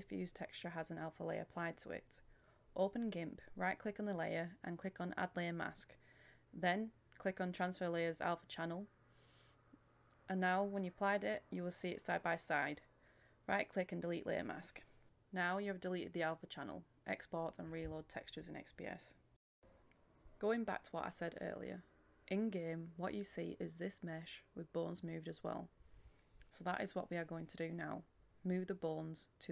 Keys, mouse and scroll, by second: 0.1-0.5 scroll up 1, 0.5 right click, 0.9 scroll up 1, 1.2 click, 2.1 right click, 2.9 click, 3.1 right click, 3.8 click, 4.9 right click, 5.9 click, 8.7-9.8 right drag, 10.0 click, 12.3 Return, 12.7-20.0 drag, 21.2 click, 21.5 KP_1, 22.2 click, 23.6-24.0 scroll down 1, 24.0 click, 24.5 KP_1, 24.9 click, 25.0 scroll down 1, 25.1 click, 25.5-25.9 scroll up 1, 25.9-28.1 drag, 28.1-28.4 scroll down 1, 28.4 click, 28.6-29.1 scroll down 1, 29.1 click.